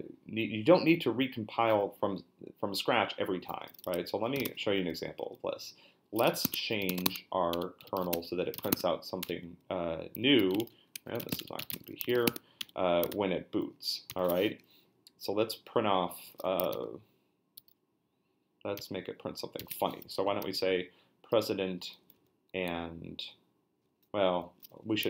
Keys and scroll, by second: 4.1-4.9 typing, 6.0-9.1 typing, 7.5 Return, 9.2 Return, 10.5-12.6 typing, 10.6 Return, 10.9 Escape, 13.1 ctrl+f, 13.6 ctrl+f, 14.1 ctrl+b, 14.6 Up, 16.7 ctrl+f, 17.6 f, 18.8 b, 19.6 b, 20.0 Down, 20.1 Up, 20.3 Up, 22.0 Up, 22.1 Up, 22.7 Right.